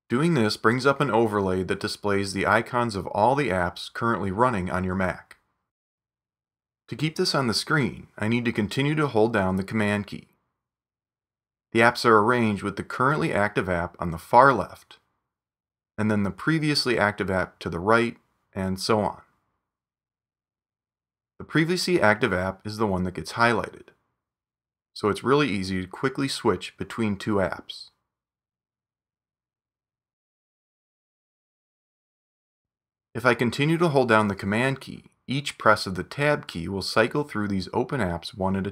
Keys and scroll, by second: 28.6 super+Tab, 30.5 super+Tab, 32.4 super+Tab, 35.5 super+Tab, 37.6 super+Tab.